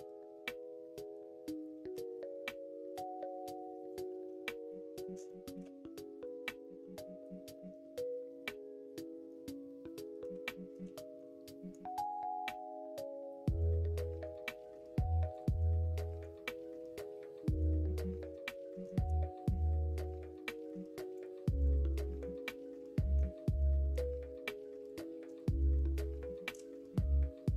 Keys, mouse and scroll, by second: 1.9 g, 4.1 ctrl+z, 4.6 middle click, 5.2 shift+middle click, 6.5 middle click, 6.9 middle click, 7.5-10.2 middle drag, 10.4 shift+middle click, 11.5 middle click, 12.0 click, 15.2 click, 16.2 click, 16.5 alt+z, 17.0 alt+z, 17.7 middle click, 18.6 middle click, 19.4-20.6 middle drag, 21.1 click, 21.7 click, 22.0 middle click, 22.9 middle click, 23.9-25.3 drag, 25.7 middle click, 26.1 shift+middle click, 26.8 middle click.